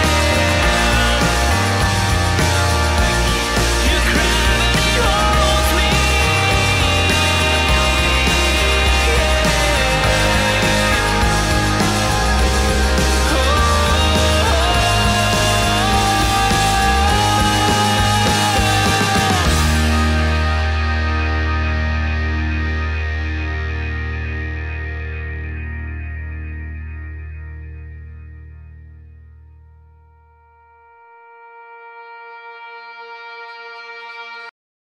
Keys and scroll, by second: 3.6 super+z, 4.6 super+z, 6.1 scroll, 7.8 super+z.